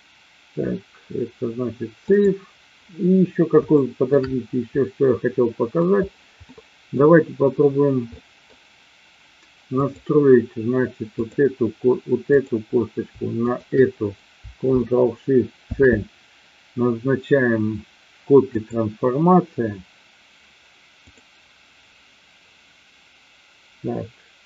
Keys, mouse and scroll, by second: 3.7-4.2 shift+middle drag, 4.3-5.8 middle drag, 6.4-6.9 middle drag, 8.2 middle click, 9.7 click, 11.3 click, 12.3-12.7 drag, 13.4 shift+click, 15.5 ctrl+shift+c.